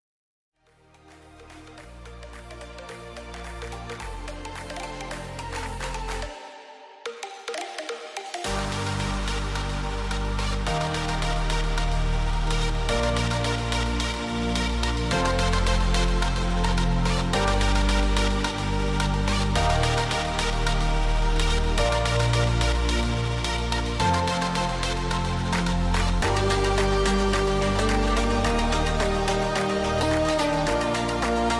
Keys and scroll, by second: 4.5 BackSpace, 5.6-8.0 typing, 10.3 ctrl+c, 11.1 ctrl+v, 13.3-14.3 typing, 17.1 Return, 17.3-20.7 typing, 21.4 ctrl+v, 23.9-24.9 typing, 27.3 Return, 30.2-31.5 typing.